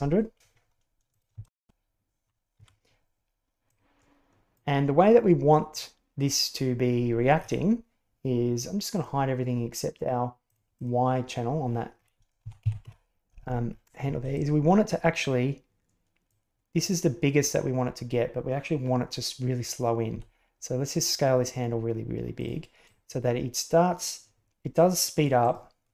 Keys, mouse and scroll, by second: 1.1 click, 1.3 shift+space, 2.6 Escape, 3.7-4.5 drag, 5.6 click, 8.9 click, 10.4 click, 10.7 click, 12.3 a, 12.5 a, 12.8 KP_Decimal, 14.3-16.2 drag, 16.7 right click, 20.0 s, 22.8-25.2 drag, 25.3 right click.